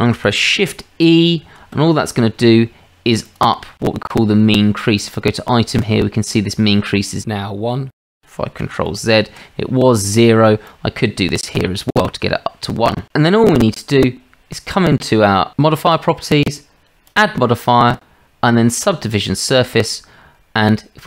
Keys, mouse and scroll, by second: 1.4 shift+e, 5.1 click, 8.9 ctrl+z, 10.7-11.8 drag, 15.9 click.